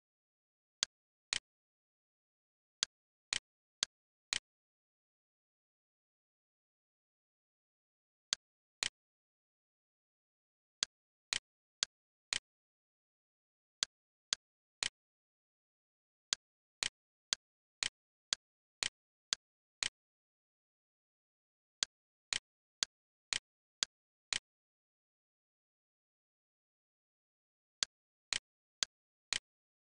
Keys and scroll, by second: 5.2 7, 5.8 4, 6.0 Return, 9.2 e.